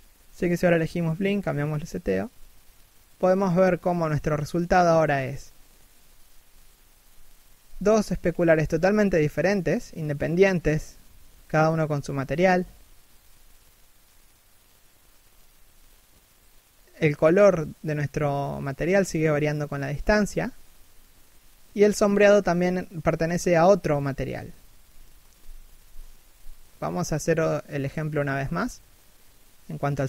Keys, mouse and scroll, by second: 2.0-2.4 scroll up 1, 3.6 right click, 3.8 r, 12.3 scroll down 1, 12.5 a, 12.7 middle click.